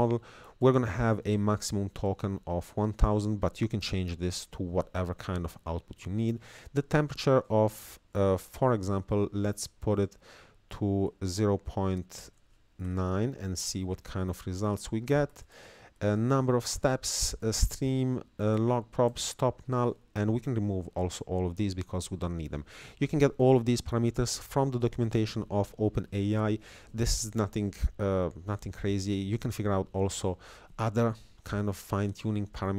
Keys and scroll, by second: 0.5 Down, 1.6 Right, 4.2 Down, 5.2 Left, 5.6 Down, 6.2 Up, 10.0-12.8 typing, 15.1 Down, 16.0 Up, 16.8 Down.